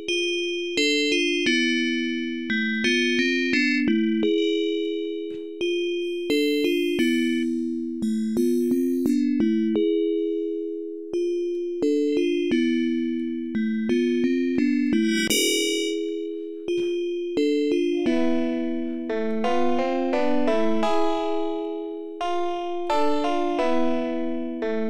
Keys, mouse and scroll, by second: 0.3-2.9 drag, 3.7-5.0 drag, 5.2-7.1 drag, 7.3 click, 8.3-11.7 drag, 11.9-13.3 drag, 14.8-17.6 drag, 17.8-19.4 drag, 22.4 click, 23.4-24.8 drag.